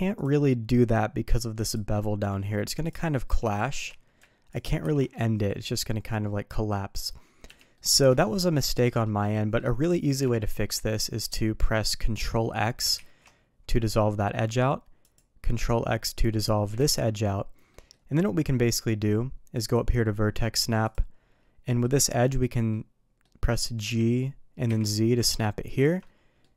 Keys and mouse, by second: 1.6 ctrl+click, 2.8 ctrl+click, 3.1 middle click, 3.5 shift+middle drag, 4.4 ctrl+click, 4.8 ctrl+b, 7.7-8.0 middle drag, 8.2-8.5 shift+middle drag, 8.7 shift+middle drag, 9.3 middle click, 10.3-10.6 shift+middle drag, 10.9 middle click, 12.1 click, 12.9 ctrl+x, 15.0 click, 16.7 ctrl+x, 17.6 middle click, 18.7 middle click, 19.6-20.3 drag, 20.8 click, 21.6 middle click, 22.2 middle click, 22.6-23.2 middle drag, 23.7 g, 26.0 middle click.